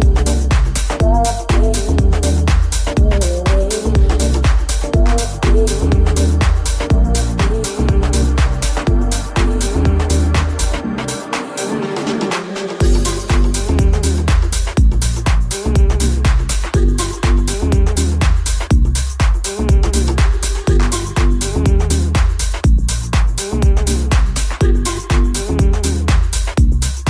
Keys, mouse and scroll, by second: 1.4 alt+z, 2.0 alt+z, 9.2 ctrl+z, 10.9-14.1 drag, 10.9 w, 13.4 r, 14.1-19.4 middle drag, 19.4 right click, 19.5 shift+middle click, 19.6 shift+s, 19.9 ctrl+middle click, 19.9 shift+s, 20.8 right click, 20.9-24.3 middle drag, 24.3 right click, 24.3-27.0 middle drag.